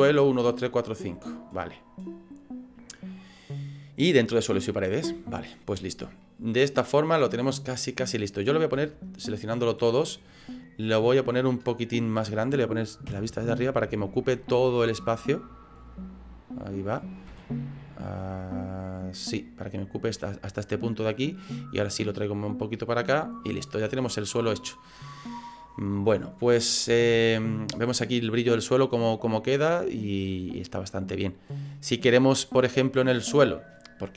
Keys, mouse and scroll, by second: 5.3 middle click, 5.7 right click, 6.2 middle click, 8.4 right click, 8.9 shift+right click, 9.3 right click, 9.5 right click, 9.9 right click, 10.3 right click, 11.3 middle click, 13.1 KP_7, 14.0 shift+middle click, 14.7 click, 16.0 click, 17.3 s, 19.8 middle click, 20.9 scroll up 2, 21.0 middle click, 21.9 click, 23.6 middle click, 24.2 right click, 24.5 middle click, 25.1 scroll down 3, 25.9-26.3 scroll up 7, 26.4 middle click, 27.1 scroll down 2, 27.5 scroll up 1, 27.5 middle click, 28.0 scroll up 2, 29.0 middle click.